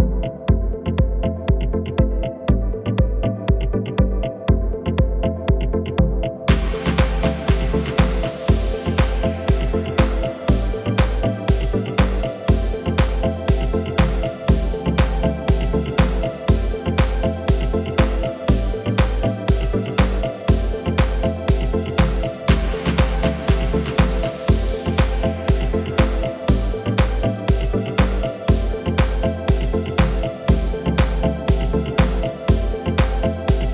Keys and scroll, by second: 2.4 r, 2.9 r, 4.5 x, 6.5 -, 7.7 KP_9, 9.1 Return, 9.8 Tab, 14.0 Tab, 20.3 g, 22.9 Tab, 30.2 Tab.